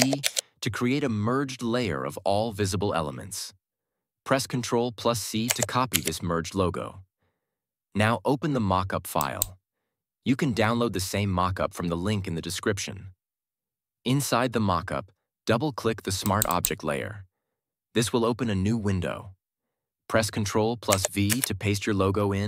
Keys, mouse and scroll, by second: 0.1 ctrl+alt+shift+e, 5.4 ctrl+alt+shift+e, 5.8 ctrl+c, 9.1 click, 9.7 click, 16.1 click, 20.8 click, 21.2 ctrl+v.